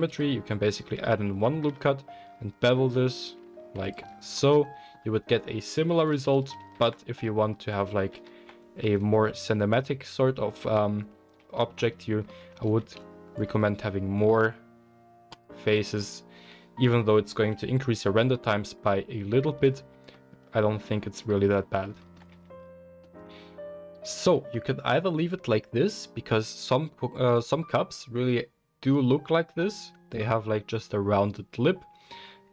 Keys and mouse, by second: 1.5 ctrl+b, 3.9-7.7 middle drag, 3.9 Tab, 6.0 ctrl+z, 6.5 ctrl+z, 8.1 ctrl+z, 8.8-9.8 middle drag, 10.8-27.2 middle drag, 12.8 ctrl+r, 22.3 Tab, 27.2 click, 27.3-32.5 middle drag.